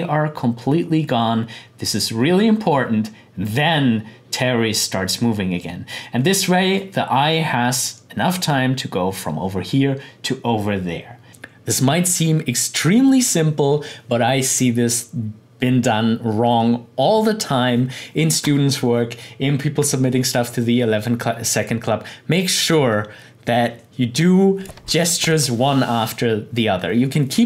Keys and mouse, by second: 11.3 click.